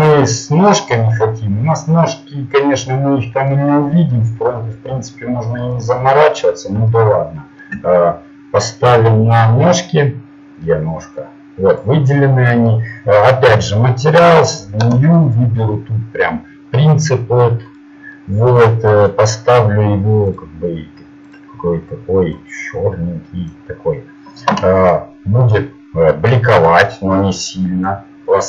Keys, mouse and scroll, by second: 5.7-7.1 right drag, 9.3 KP_Decimal, 10.2 middle click, 14.5-15.8 drag, 20.6 click, 22.2 click.